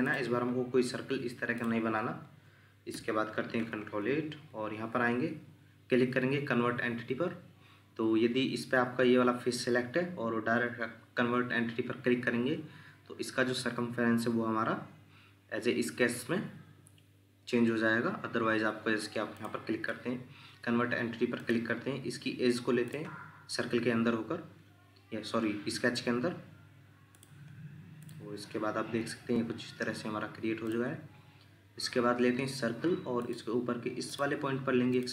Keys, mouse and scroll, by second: 2.9 ctrl+8, 3.9 scroll down 1, 19.7 Escape.